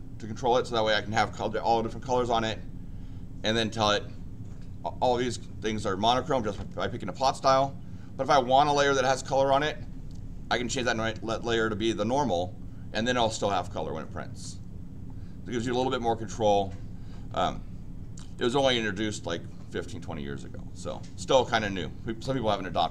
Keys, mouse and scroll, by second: 10.7 click, 15.6 click, 18.3 click.